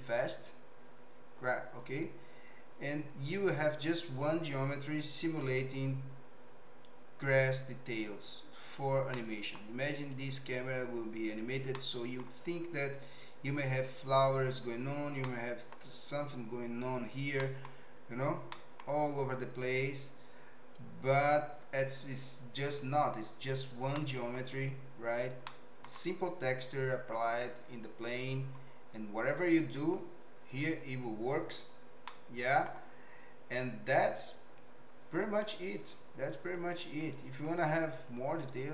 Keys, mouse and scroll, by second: 9.1 middle click, 11.7 click, 11.9 middle click, 15.2 middle click, 17.4 middle click, 18.5 middle click, 24.0 middle click, 25.4 middle click, 32.0 middle click.